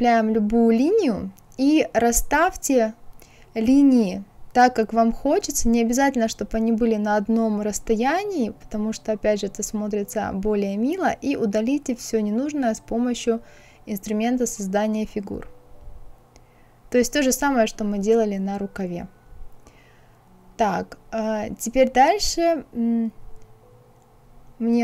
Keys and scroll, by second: 12.7 KP_6, 13.3 Return.